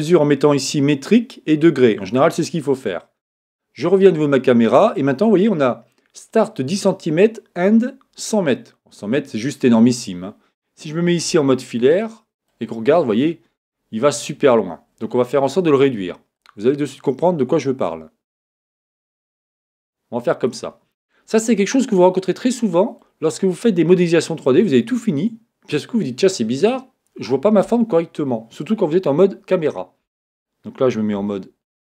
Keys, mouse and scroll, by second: 3.8-5.7 drag, 11.2 z, 11.8-13.6 middle drag, 13.6 scroll up 1, 13.7-14.4 scroll down 1, 14.4-15.1 scroll up 1, 15.1 scroll up 1, 15.4 middle click, 16.3 scroll up 1, 16.4-18.2 drag, 21.7-23.4 middle drag, 29.1 KP_0, 31.1 z.